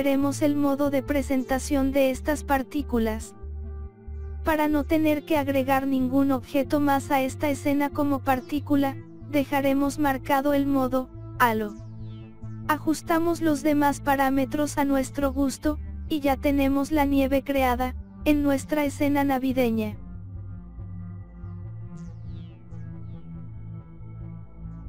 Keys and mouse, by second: 0.7 click, 1.9 click, 2.5 click, 4.3-5.6 drag, 6.2 KP_0, 6.8 click, 9.5-10.5 drag, 11.6 click, 12.7 click, 14.0 click, 14.5 0, 15.4 click, 17.1 click, 17.8 click, 19.0 click, 21.3 click, 23.3-24.8 drag.